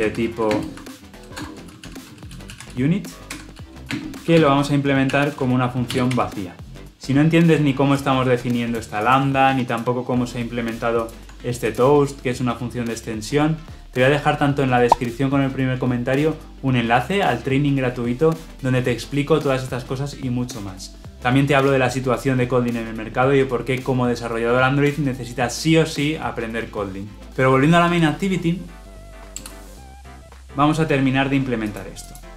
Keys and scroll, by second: 3.2 Escape, 5.8 ctrl+alt+l, 6.0 ctrl+alt+o, 11.0 ctrl+b, 12.9 ctrl+alt+Left.